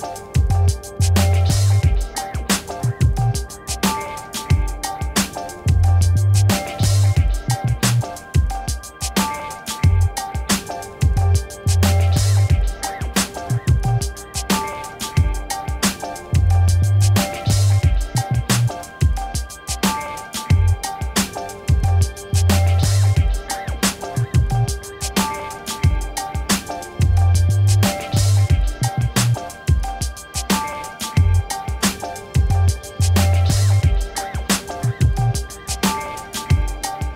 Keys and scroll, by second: 1.3 ctrl+t, 9.5 ctrl+t, 16.5 Return, 24.2 shift+b, 24.7 Return.